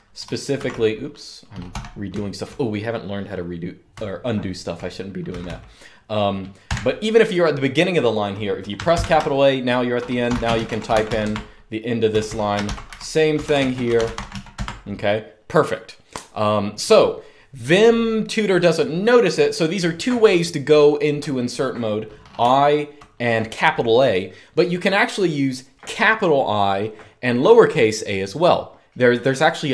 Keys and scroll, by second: 0.3 ctrl+r, 1.2-5.2 typing, 6.4 0, 8.7 shift+a, 9.7-14.9 typing, 21.9-23.1 typing.